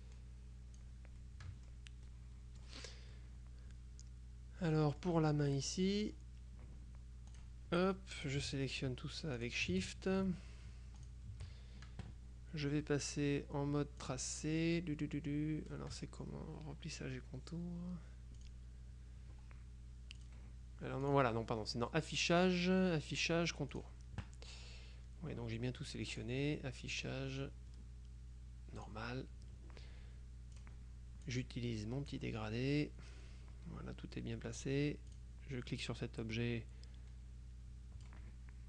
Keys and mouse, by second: 0.1-1.4 drag, 2.2 click, 3.2-6.1 drag, 6.1 middle click, 6.6 click, 7.4 click, 8.3 shift+click, 9.4 click, 11.1 shift+click, 14.1 click, 18.5 click, 20.3 click, 21.2 click, 23.8 click, 26.2 click, 28.9 click, 30.6 click, 31.4-32.7 drag, 34.7 click, 36.5-38.6 drag.